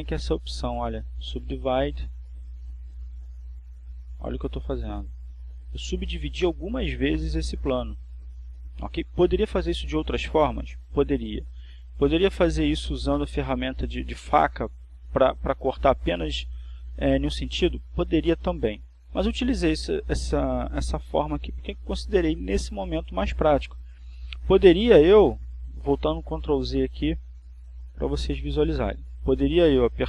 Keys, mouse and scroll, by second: 2.9-4.9 drag, 5.6 click, 7.0 click, 9.2 click, 28.4 a.